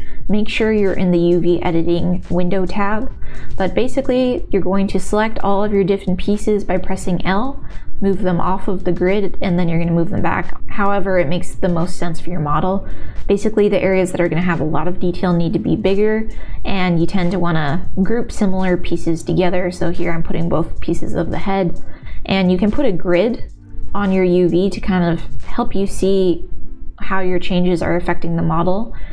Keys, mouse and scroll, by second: 0.0-1.6 typing, 2.9 l, 3.2 g, 4.2 l, 4.5 g, 5.7 l, 6.2 l, 6.4 g, 7.8 l, 8.3 s, 10.6 r, 10.9 click, 11.5 l, 11.6 g, 12.6-15.1 typing, 16.8 g, 17.7 click, 18.0 l, 18.3 g, 19.0 r, 22.4 n, 25.8 n.